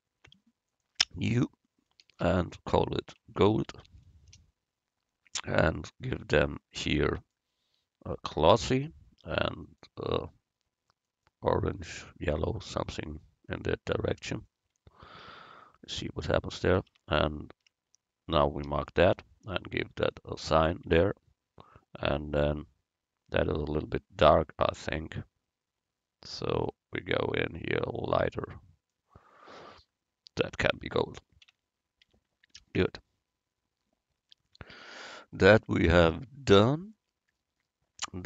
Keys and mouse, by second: 0.7-3.9 drag, 7.2-9.2 drag, 9.7-11.6 drag, 17.0 Tab, 17.7 a, 18.7 l, 20.1-21.1 drag, 21.1 Tab, 26.6-28.5 drag, 31.5 Tab, 32.1 Tab, 32.6 a.